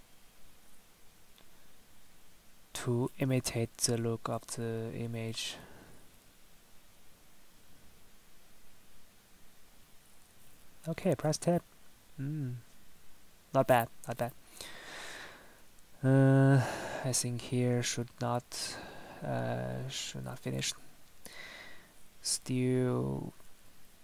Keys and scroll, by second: 10.3 Tab, 14.2 Tab, 23.3 Tab.